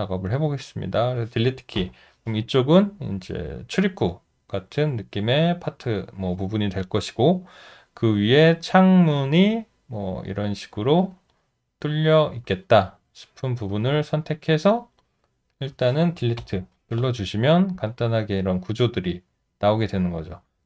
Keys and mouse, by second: 0.6 alt+click, 1.8 Delete, 12.3 shift+click, 14.3 shift+click, 16.4 Delete, 18.0 alt+click.